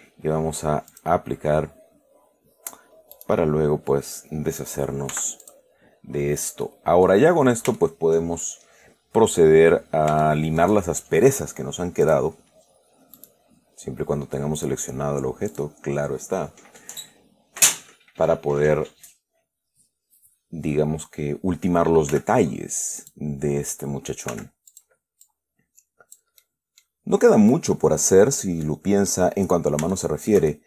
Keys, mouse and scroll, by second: 1.2 click, 3.4 right click, 5.4 x, 5.7 click, 6.9 scroll down 2, 6.9 click, 8.1 shift+click, 9.4-10.4 scroll up 2, 10.5 shift+click, 12.3 click, 13.5 right click, 14.9 click, 15.8 click, 22.4 f, 23.3 click, 24.6 f, 25.0 click, 25.5-26.6 drag, 26.7-27.3 middle drag, 27.8-28.9 drag, 28.9-29.6 middle drag, 30.2-30.6 shift+middle drag.